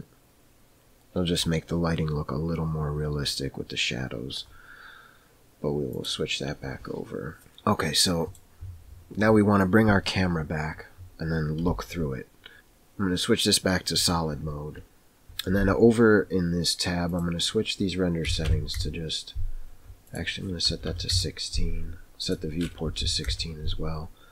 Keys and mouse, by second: 7.4-8.4 middle drag, 11.6 n, 17.3 click, 22.2 click.